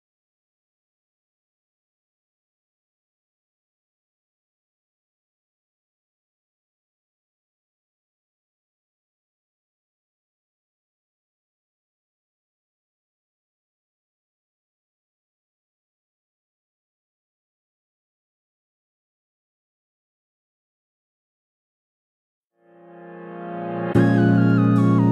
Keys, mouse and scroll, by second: 0.0 KP_7, 2.9-3.9 scroll up 1, 3.9-4.2 scroll down 1, 4.5-7.5 middle drag, 4.8 KP_0, 4.9 scroll up 2, 5.8 g, 7.5 Tab, 8.2 click, 10.4 ctrl+click, 11.8 shift+click, 12.0 shift+click, 13.2-15.3 drag, 16.1 shift+click, 17.9 click, 18.1 click, 18.4 ctrl+z, 18.5 ctrl+click, 18.7 ctrl+click, 20.3 ctrl+z, 21.6-23.7 middle drag, 22.2 KP_7, 23.0 Delete, 23.7 ctrl+click, 24.9 Delete.